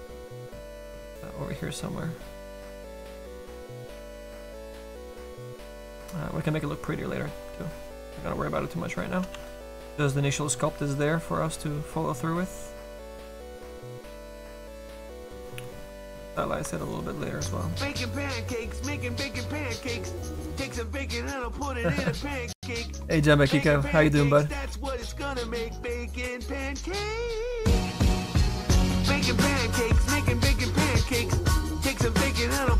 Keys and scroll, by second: 4.4 s, 4.7 s, 5.1 s, 9.3 s.